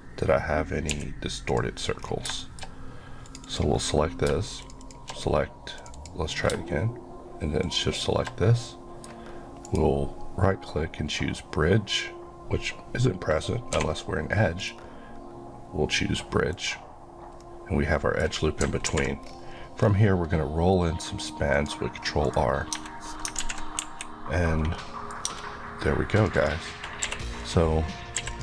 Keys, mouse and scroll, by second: 0.9 scroll up 1, 0.9 x, 1.4 click, 2.0 scroll down 1, 2.4 shift+middle click, 2.7-3.2 shift+scroll up 1, 4.6 shift+click, 5.1 click, 7.6 click, 8.6 middle click, 9.6 right click, 13.7 2, 14.6 right click, 17.4 middle click, 18.9 ctrl+r, 19.2 scroll up 1, 19.8 scroll up 1, 21.5 click, 22.2 right click, 22.7 Tab, 23.4 alt+z, 23.8 KP_1, 24.7 middle click, 25.2 middle click, 25.3 Tab, 26.2 click, 27.0 q, 27.4 click, 28.2 q, 28.3 click.